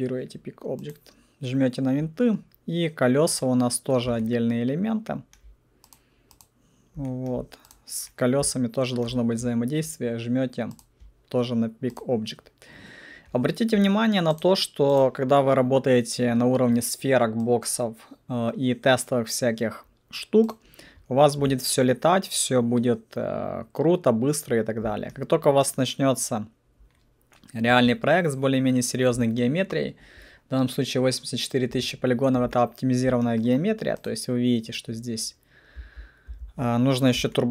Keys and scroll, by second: 35.8 alt+F4, 36.2 alt+F4.